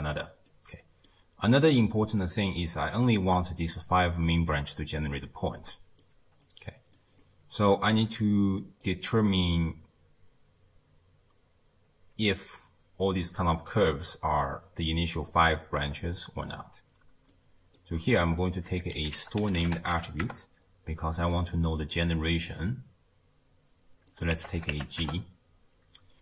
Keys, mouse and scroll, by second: 0.5-2.2 middle drag, 2.2 click, 5.7-6.4 middle drag, 6.4 click, 7.2-10.2 middle drag, 17.3-18.5 drag, 21.8-26.2 drag.